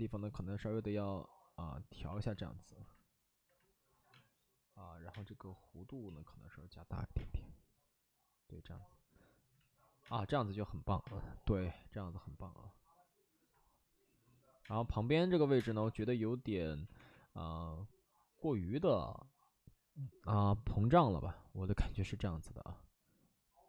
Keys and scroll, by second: 4.0 space, 5.0 space, 6.0 ctrl+z, 7.1 space, 9.4 ctrl+z, 9.9 space, 11.0 space, 14.5 space, 15.4 1, 15.5 space, 15.7 1, 16.6 ctrl+z, 16.9 2.